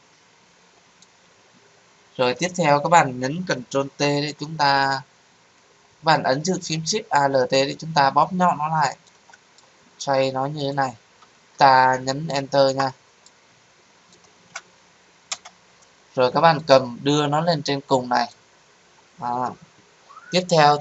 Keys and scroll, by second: 3.8 ctrl+t, 15.3 Return.